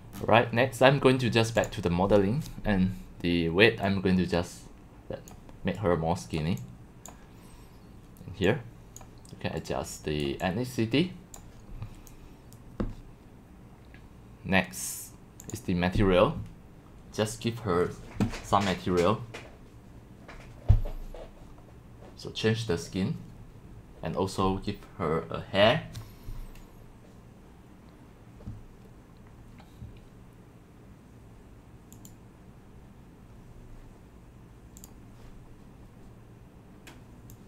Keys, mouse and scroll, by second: 1.6 click, 3.8-5.3 drag, 5.5-5.8 scroll down 1, 5.8-6.2 drag, 6.6-7.1 drag, 8.5-9.3 drag, 9.6-10.2 drag, 10.2 middle click, 10.5-11.4 drag, 15.4 click, 20.7 middle click, 21.2 middle click, 34.8 click, 35.2 click, 35.6 drag, 36.9 click.